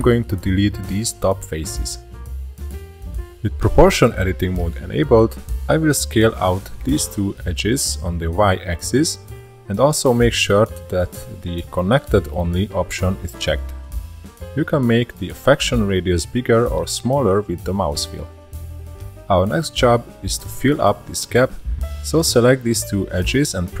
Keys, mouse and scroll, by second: 0.0 shift+click, 0.1 shift+click, 0.4 shift+click, 0.5-1.1 shift+middle drag, 1.1 shift+click, 1.2 shift+drag, 1.6 shift+middle click, 2.1 x, 3.9-6.0 shift+middle drag, 6.0 click, 6.4-9.4 drag, 10.0-12.2 middle drag, 12.2-13.6 scroll up 1, 13.6 s, 18.3 shift+middle click, 18.4 2, 18.7 click, 19.0 shift+middle click, 19.9 shift+click, 20.2-21.0 shift+middle drag, 21.0-21.4 scroll up 2, 21.4-22.5 shift+middle drag, 22.5 f, 22.8 scroll down 1, 23.0-23.8 shift+middle drag.